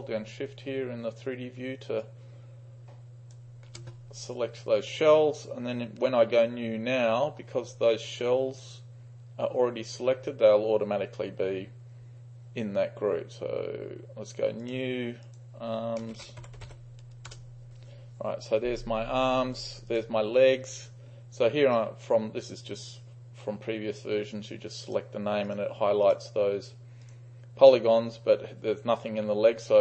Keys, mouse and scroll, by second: 2.1-3.5 shift+drag, 4.1 click, 14.7-15.2 drag, 15.3 click, 16.0-17.2 typing, 17.3 Return, 19.9 click, 21.7 click, 24.9-26.2 drag, 27.1-29.8 drag.